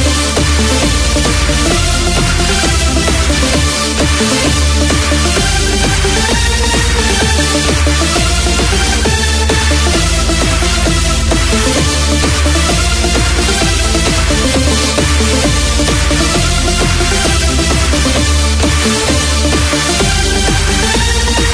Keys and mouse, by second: 4.3 shift+s.